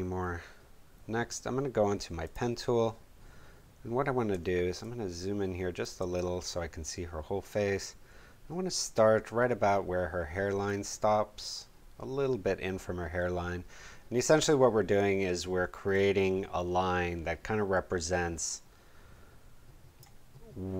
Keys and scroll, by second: 4.3 space.